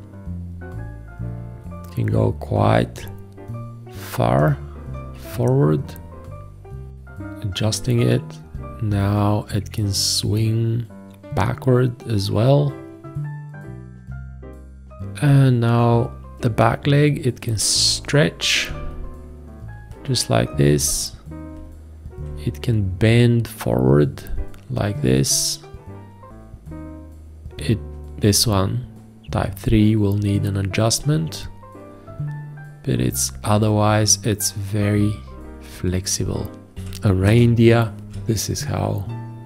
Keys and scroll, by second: 36.8 ctrl+a, 38.0 ctrl+a.